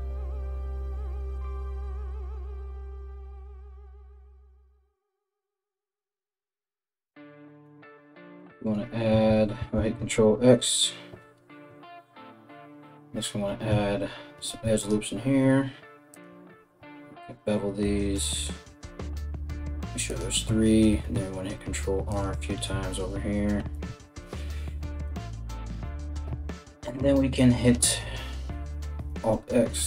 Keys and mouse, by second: 0.7-2.3 typing, 0.9 right click, 1.5 right click, 2.0 right click, 2.7 alt+right click, 3.8 right click, 4.2-5.9 typing, 4.5 right click, 5.1 right click, 5.5 right click, 6.4 right click, 6.9 KP_1, 9.3 alt+x, 13.9 ctrl+r, 16.2 ctrl+b, 20.5 ctrl+r, 28.7 alt+x.